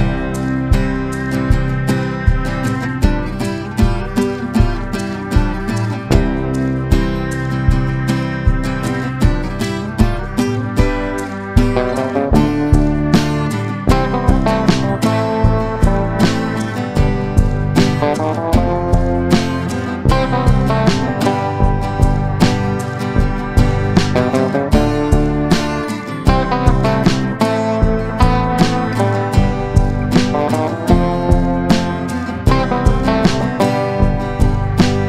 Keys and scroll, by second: 14.0 space, 20.7 Delete, 22.8 ctrl+z, 32.3 F3, 32.6 F2.